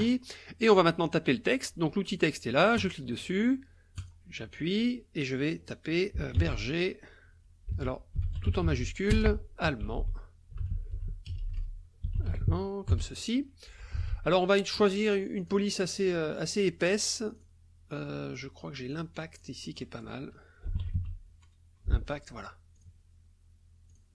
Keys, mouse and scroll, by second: 2.8 click, 4.0 click, 6.4 shift+b, 7.7 Caps_Lock, 7.9-13.1 typing, 13.9 ctrl+a, 15.4 click, 17.3 click, 18.9 click, 19.4 click, 19.7 click, 20.7 i, 20.9 p, 22.7 click, 23.9 click.